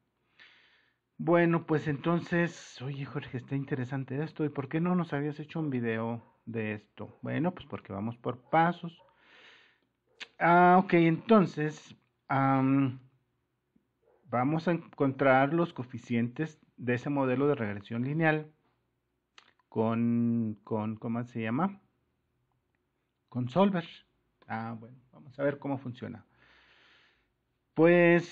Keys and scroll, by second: 2.1 Escape, 5.6 Delete.